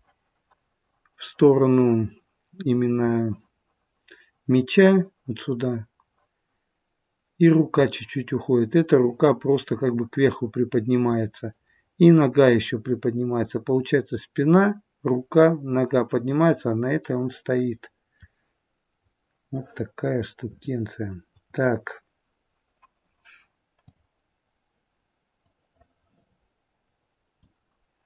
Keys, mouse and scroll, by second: 11.6-13.9 scroll down 2, 17.0 middle click, 19.5 middle click, 23.8 click, 24.3-25.5 scroll down 2, 25.5 click.